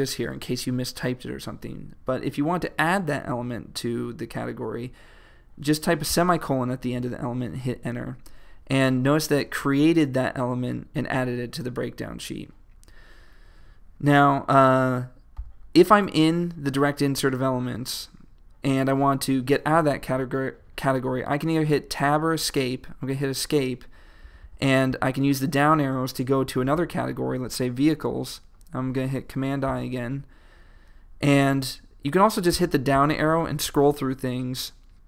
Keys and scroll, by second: 7.6 Return, 15.4 super+i, 22.7 Escape, 24.7 Down, 28.3 Down, 29.8 super+i, 32.6 Down.